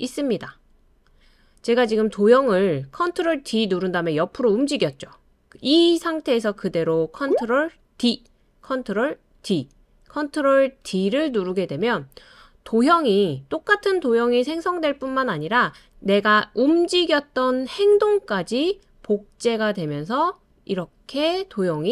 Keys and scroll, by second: 7.9 super+d, 9.4 super+d, 10.8 super+d.